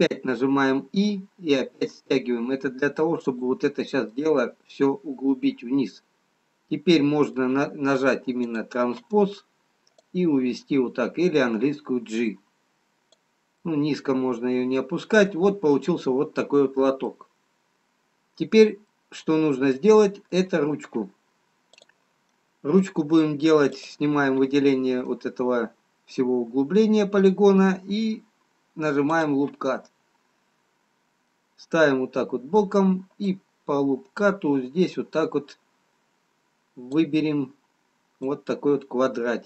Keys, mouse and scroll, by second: 4.3 middle click, 8.5 click, 9.9 click, 14.6 middle click, 17.6-19.1 scroll down 1, 19.1 middle click, 22.7 click, 22.7 middle click, 23.8 click, 25.5 middle click, 29.6 click, 32.5 middle click, 33.9 click, 38.5 click.